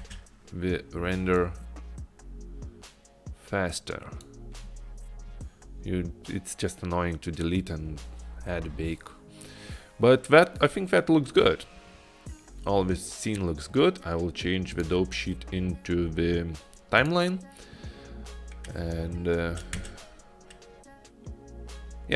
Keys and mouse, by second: 0.1 space, 1.6-4.3 drag, 17.1 click, 19.2 click, 20.0 space.